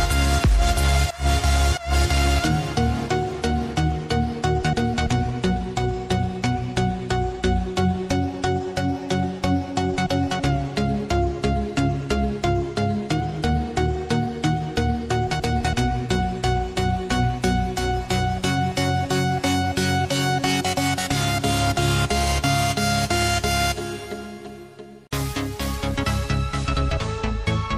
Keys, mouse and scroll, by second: 0.0 KP_1, 0.8 click, 6.5 Tab, 6.7-7.7 scroll down 2, 7.7 click, 8.3 click, 8.9 Tab, 9.3 click, 10.0 click, 11.3 click, 12.6 click, 13.7 click, 15.3 Tab, 16.3 click, 19.7 click, 20.5 shift+click, 21.7 click, 22.1 click, 22.7 click, 23.1-25.1 scroll up 1, 25.1 alt+g, 26.3-27.7 drag.